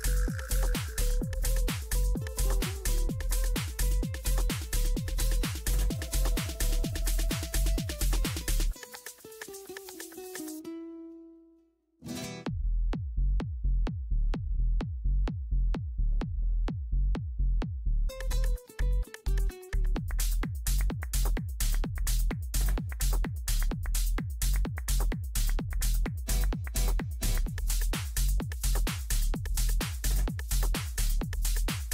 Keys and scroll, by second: 23.7 ctrl+shift+g, 25.2-26.1 typing, 27.5 ctrl+End.